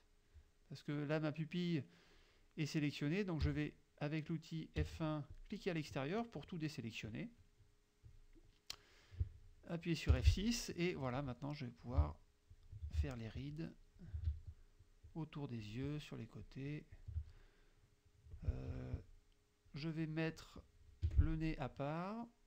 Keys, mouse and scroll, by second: 3.5 F1, 4.8 F1, 5.4 click, 10.2 F6, 11.2 click, 12.6 shift+click, 13.6 shift+click, 14.9 shift+click, 15.7 shift+click, 16.5 shift+click, 17.0 shift+click, 17.4 shift+click, 18.8 F2, 19.1 click, 21.1 F6.